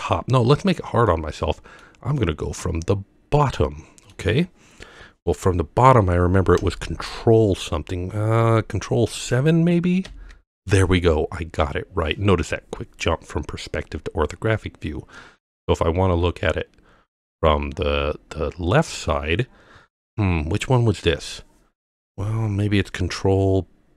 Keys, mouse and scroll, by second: 1.1-1.8 middle drag, 2.2-4.1 middle drag, 10.1 ctrl+KP_7, 15.4-18.8 middle drag.